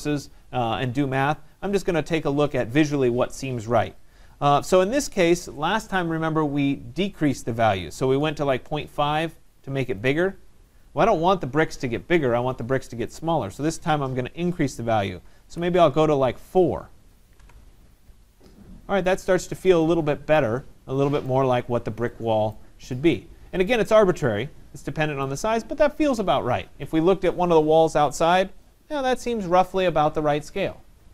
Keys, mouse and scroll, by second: 2.3-7.3 drag, 7.7-8.7 typing, 10.0 click, 13.1 click, 16.0 4, 17.4 Tab, 19.3 middle click, 19.4 middle click, 21.3 right click, 21.8 middle click, 21.9 middle click, 22.6 right click, 23.0 click.